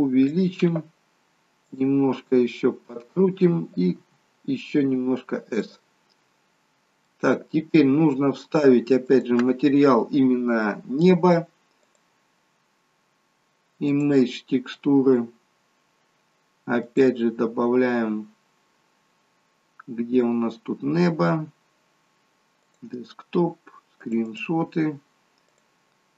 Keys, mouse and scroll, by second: 1.8 click, 3.9 s, 6.7 scroll down 4, 7.1 middle click, 9.1 click, 11.8 click, 20.4 click.